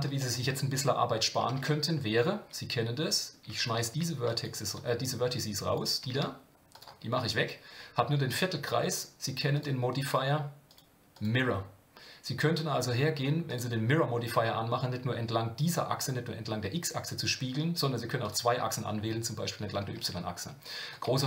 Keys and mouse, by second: 0.2-0.5 shift+middle drag, 1.6 Tab, 2.2-3.7 drag, 3.9 x, 4.8 click, 6.0 x, 7.4 Tab, 9.5 click, 10.1-10.4 drag, 10.7 click, 11.1-13.6 drag, 18.2 click, 19.9 Tab, 20.9 click.